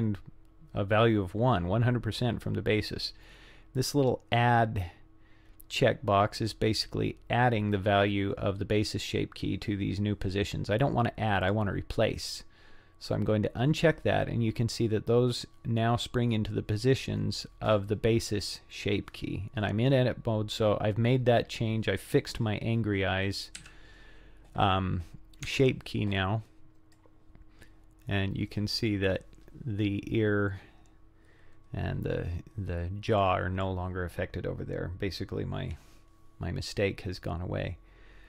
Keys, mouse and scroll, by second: 11.5 click, 23.6 z, 25.5 Tab, 26.9 click, 30.9-33.6 drag.